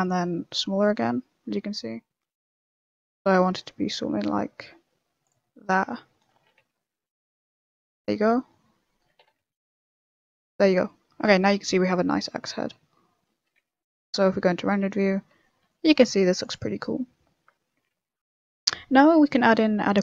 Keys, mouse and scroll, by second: 5.4 middle click, 6.0 middle click, 6.3 s, 8.0 Tab, 8.1 middle click, 8.1 scroll up 1, 8.6 middle click, 9.0 Tab, 9.2 s, 10.1 middle click, 10.4 Tab, 10.6 middle click, 10.9 scroll down 3, 11.2 a, 11.4 middle click, 12.3 middle click, 13.5 z, 13.9 middle click, 14.7-15.0 scroll down 6, 15.0 middle click, 15.4 shift+middle click, 15.6 middle click, 15.9 scroll up 4, 16.1 middle click, 16.4 click, 16.6 scroll down 3, 16.8 middle click, 17.9 z, 18.0 middle click, 18.8 shift+middle click, 19.0 shift+scroll up 3, 19.3 middle click.